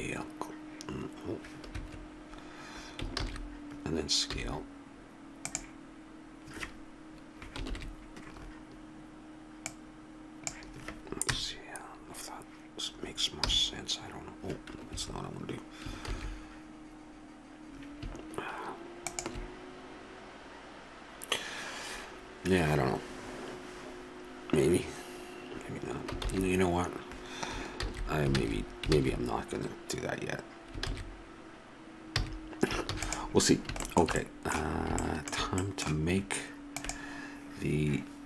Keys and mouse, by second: 1.7 Escape, 3.7 ctrl+z, 4.3 s, 9.6 click, 11.3 KP_0, 13.4 g, 16.4 shift+z, 20.5-21.7 drag, 26.6 shift+z, 27.8 ctrl+z, 28.4 ctrl+z, 28.9 ctrl+z, 30.8 ctrl+z, 32.1 a, 32.9 ctrl+s.